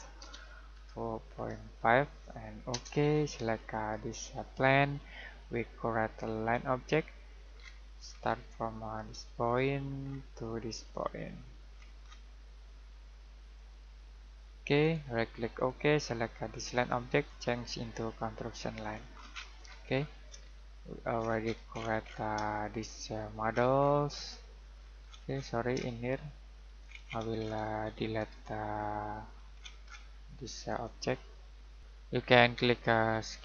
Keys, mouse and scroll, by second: 0.0-1.8 typing, 2.7 Return, 4.0 click, 7.5-8.0 scroll down 1, 9.4 click, 10.0-10.7 scroll down 1, 13.5 click, 15.5 click, 17.2 right click, 18.8 click, 19.1 scroll down 1, 19.3-20.3 scroll up 1, 20.5 shift+middle click, 21.2 scroll down 1, 21.4-22.4 scroll up 1, 22.5 middle click, 23.4-23.7 scroll down 1, 23.7-24.2 scroll up 1, 24.2-25.7 scroll down 1, 25.8 shift+middle click, 26.8 scroll down 1, 27.0-27.8 scroll up 1, 27.8-28.2 scroll down 1, 28.9 middle click, 29.3-30.6 scroll down 1, 30.6 click.